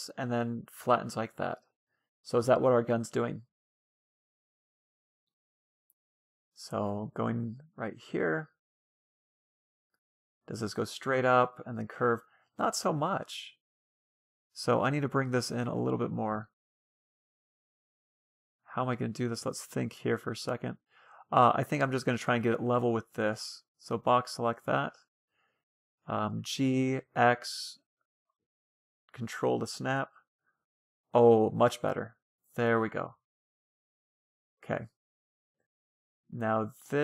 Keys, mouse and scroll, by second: 0.4-1.9 scroll down 1, 1.9 middle click, 4.6 middle click, 4.9 Tab, 5.3 Tab, 6.4-9.7 middle drag, 9.8 middle click, 10.9-12.5 middle drag, 13.5 Tab, 14.1-15.7 middle drag, 15.4-16.9 right drag, 17.6 a, 17.7-18.2 scroll up 1, 18.2-19.5 middle drag, 19.5-20.1 scroll up 1, 20.1-21.8 middle drag, 22.2 a, 22.5 a, 22.6 b, 23.6 b, 25.0-26.6 drag, 25.9 g, 28.5 Tab, 28.7-32.3 middle drag, 36.4-37.0 middle drag.